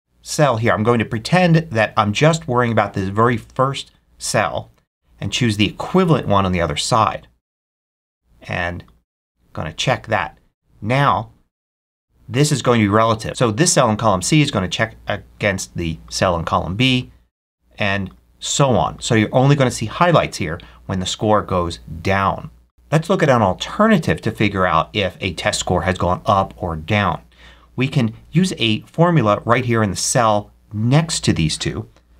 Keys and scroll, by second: 32.0 =.